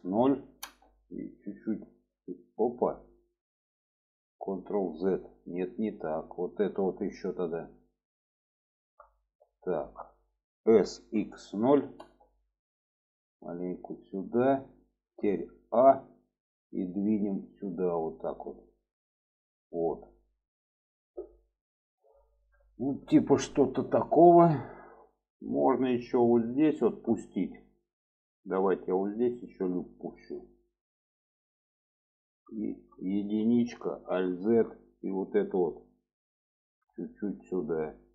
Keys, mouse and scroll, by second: 1.6 click, 3.4 middle click, 4.6 ctrl+z, 5.4 middle click, 6.5 middle click, 8.4 alt+shift+click, 9.1 alt+middle click, 10.7 s, 13.1-14.5 drag, 14.8 shift+middle click, 15.7 a, 17.0-19.2 drag, 21.1-22.9 middle drag, 23.1 shift+middle click, 23.9-25.1 middle drag, 25.8 shift+middle click, 26.8 shift+middle click, 28.7 drag, 30.2 click, 32.6 shift+middle click, 33.4 1, 33.9 alt+z, 34.4 shift+middle click, 35.9 click, 37.1-38.1 drag.